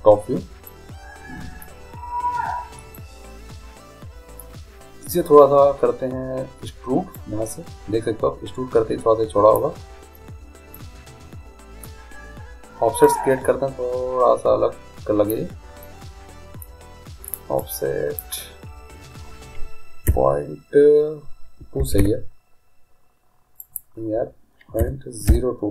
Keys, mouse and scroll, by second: 4.3 middle click, 7.3-9.3 drag, 10.9-12.6 middle drag, 13.2-15.2 drag, 16.0-17.8 middle drag, 17.8-19.7 drag, 23.8-25.6 drag.